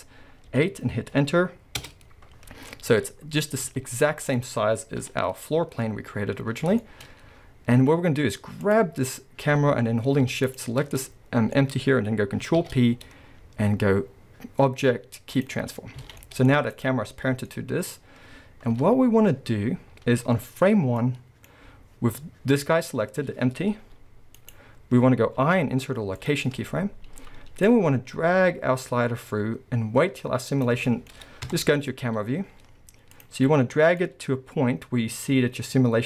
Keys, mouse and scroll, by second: 3.4 scroll, 3.7 z, 5.5-6.1 scroll, 7.6 scroll, 8.1-8.6 scroll up 1, 8.6 click, 10.5 shift+click, 10.8 scroll down 1, 10.9-16.8 middle drag, 12.6 ctrl+p, 16.0 alt+a, 16.8 click, 17.5-18.8 middle drag, 18.7 scroll up 2, 18.8 KP_7, 19.3-20.1 scroll up 1, 21.1 middle click, 22.3-23.8 scroll up 1, 23.8 g, 24.5 right click, 25.4 i, 27.7-30.9 drag, 30.9-34.0 middle drag, 31.4 KP_0, 32.1 scroll up 2, 32.3 z, 34.0-36.0 drag.